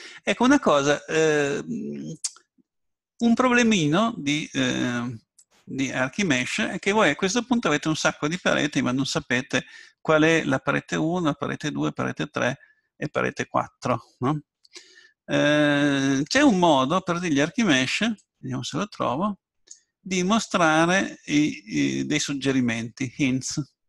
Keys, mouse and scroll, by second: 0.5-2.1 middle drag, 14.5-16.8 middle drag, 18.2-23.8 drag.